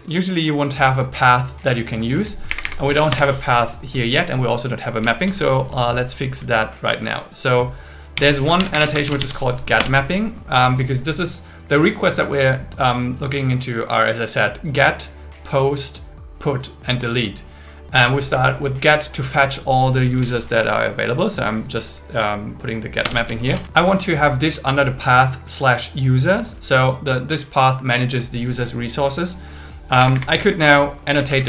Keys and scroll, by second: 2.5 Up, 3.1 Return, 8.2 alt+l, 8.6 shift+g, 9.1 shift+m, 9.8 Return, 23.0 Return, 23.5 alt+l, 30.0 Up, 30.4 Down, 31.3 super+Right.